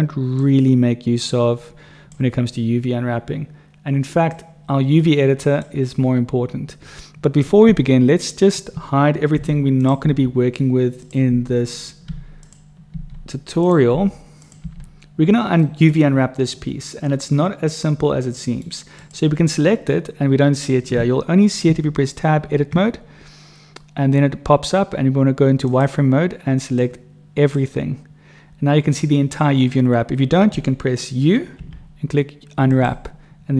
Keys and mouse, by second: 0.5-2.2 drag, 4.5-5.6 drag, 8.1 click, 9.3 h, 9.7 click, 10.1 h, 11.4-14.6 typing, 14.4 click, 15.7 click, 17.0-17.9 drag, 17.9-18.6 middle drag, 21.6 Tab, 25.6 click, 26.8 click, 31.6 u.